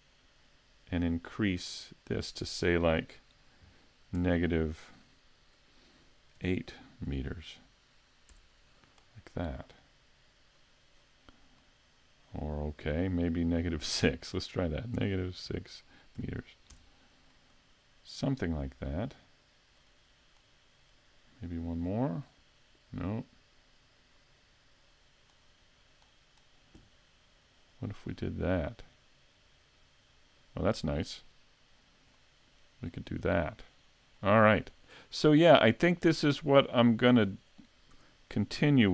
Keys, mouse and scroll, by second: 1.7 click, 10.6 click, 11.6 middle click, 13.7 click, 19.8 click, 22.2 click, 24.2 click, 24.8 click, 32.1 middle click, 33.5 middle click, 35.6 click, 37.4 click, 38.0 a, 38.4 scroll down 1, 38.8 scroll up 1.